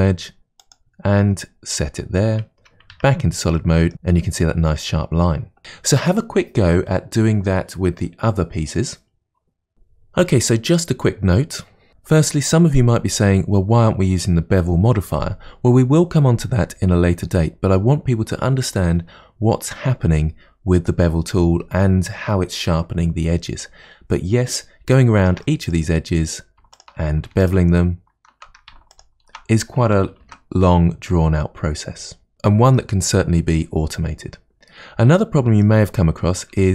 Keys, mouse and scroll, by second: 2.9 Tab, 3.6 middle click, 4.2-5.6 scroll down 2, 9.7 Tab, 24.9-26.1 shift+middle drag, 26.1-26.8 scroll up 1, 26.8 alt+click, 27.5 alt+shift+click, 28.9 alt+shift+click, 30.3 ctrl+b, 32.3-33.4 scroll down 1, 35.2-36.7 middle drag.